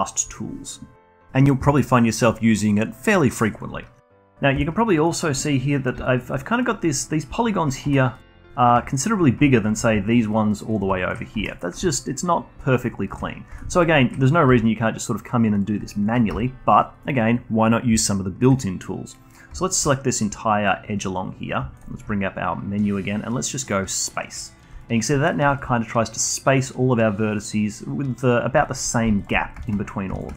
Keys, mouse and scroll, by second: 3.5 click, 4.0-4.6 scroll up 1, 4.6-5.1 alt+drag, 5.1-6.0 alt+middle drag, 6.0-6.6 alt+drag, 7.8 3, 7.9 drag, 8.1 click, 8.6 shift+click, 8.9-9.5 alt+drag, 9.6 shift+drag, 10.1 shift+drag, 10.3 shift+drag, 10.5 shift+drag, 10.7 shift+click, 11.0-11.4 alt+drag, 11.4 2, 11.5 drag, 11.9-13.5 alt+drag, 13.5 1, 13.8 click, 14.0-14.5 alt+drag, 14.5 g, 15.9 alt+click, 16.3 ctrl+z, 16.7 click, 18.0-19.7 alt+drag, 21.8-24.8 shift+right drag, 24.8-27.4 alt+drag, 28.6-29.2 alt+drag, 30.1-30.3 shift+right drag.